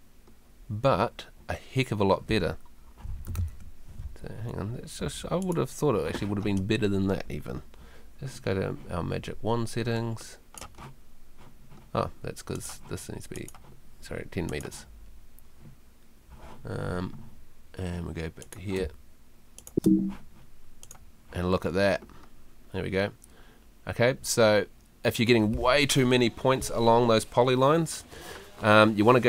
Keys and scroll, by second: 18.8 space.